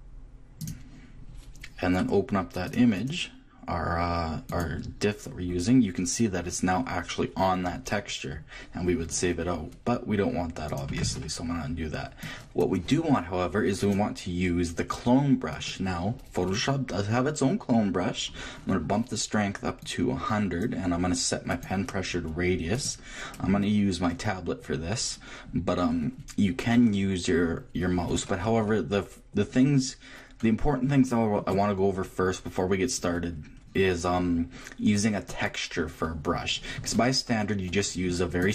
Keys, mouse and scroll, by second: 1.3-4.7 middle drag, 4.7 click, 6.1-10.7 middle drag, 10.7-15.7 drag, 18.5 middle click, 19.9-24.6 drag, 27.8 middle click, 30.8 Left, 35.3-37.1 drag, 37.1-38.4 middle drag, 38.4-38.5 drag.